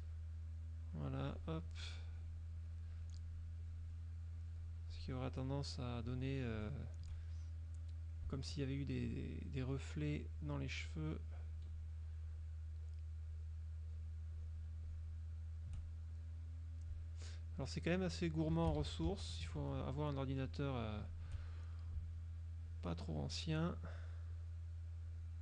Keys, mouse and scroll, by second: 0.1 shift+click, 0.9 shift+click, 2.2 shift+click, 2.7 shift+click, 3.7 shift+click, 4.5 shift+click, 5.1 shift+click, 5.5 shift+click, 6.2 shift+click, 6.7 shift+click, 7.5 shift+middle click, 9.2 shift+click, 9.7 shift+click, 10.5 shift+click, 11.0 shift+click, 11.5 shift+click, 12.4 shift+click, 12.9 shift+click, 13.4 shift+click, 14.0 shift+click, 14.5 shift+click, 15.0 shift+click, 15.5 shift+click, 16.1 shift+click, 17.7 shift+click, 18.2 shift+click, 18.9 ctrl+shift+z, 19.9 ctrl+shift+click, 20.5 shift+click, 21.1 shift+click, 21.5 shift+click, 22.8 shift+click, 23.3 shift+click, 24.5 shift+click, 25.2 shift+click.